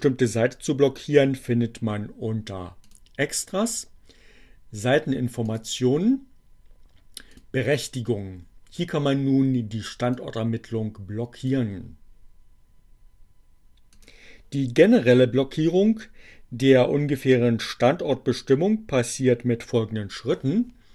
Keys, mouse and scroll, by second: 3.0 click, 5.0 click, 7.3 click, 10.1-11.8 drag, 12.8-14.3 drag.